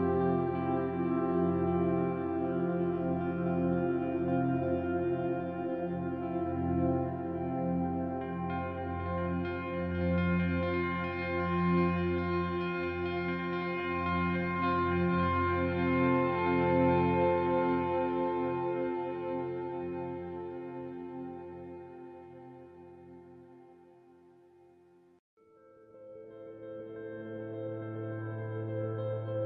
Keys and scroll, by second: 18.6 e, 19.8-21.5 typing, 28.7 z, 29.3 z, 29.3 ctrl+alt+1.